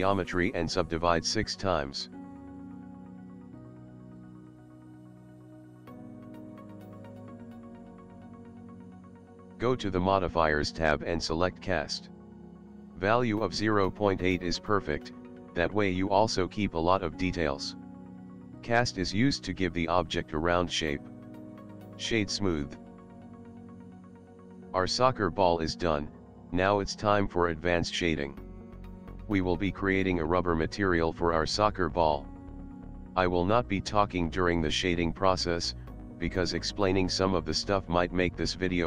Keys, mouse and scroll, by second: 2.0 click, 2.2 click, 2.3 click, 2.6 click, 3.9 click, 9.9 click, 10.8 click, 14.9 Tab, 16.1 click, 20.6 middle click, 21.4 right click, 22.7 middle click, 23.7 ctrl+middle click, 24.3 middle click, 26.6 shift+middle click, 34.4 click, 36.3 middle click, 37.1 middle click, 38.3 shift+a.